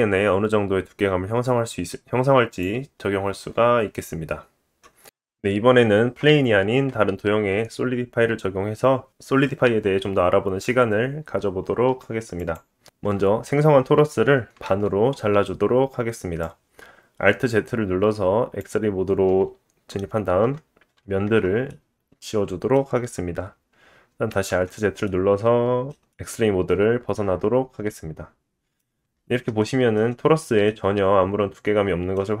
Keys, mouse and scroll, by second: 4.9 middle click, 8.4-9.1 middle drag, 9.1 click, 9.2-13.0 middle drag, 10.3 Tab, 13.0 KP_7, 14.7 alt+z, 16.4-19.5 drag, 20.4 x, 21.9 Tab, 22.3 middle click, 22.9-28.0 drag, 24.9 alt+z, 25.7 middle click, 28.3 middle click, 28.9 scroll up 2, 29.6-30.0 shift+drag, 29.6 shift+middle click, 30.2 scroll up 2, 30.7-32.4 drag, 30.7 middle click.